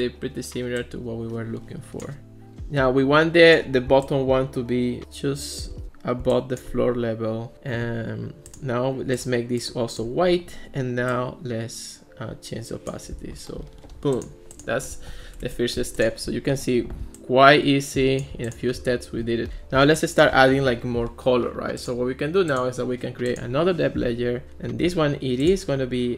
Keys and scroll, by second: 15.3 Escape.